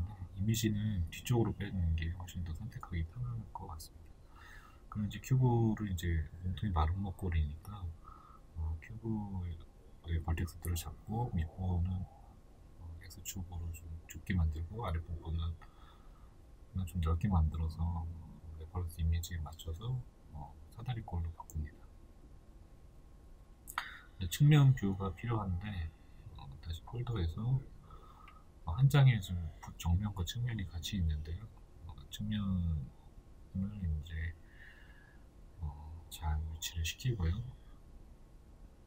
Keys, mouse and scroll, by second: 10.1 shift+middle click, 12.5 shift+middle click, 16.6-17.2 scroll down 2, 17.2-28.3 shift+middle drag, 19.2 KP_3, 23.1 Tab, 28.3-30.2 drag, 30.2-32.6 shift+middle drag, 30.9 g, 32.6 click, 33.3 r, 35.2 click, 35.6 g.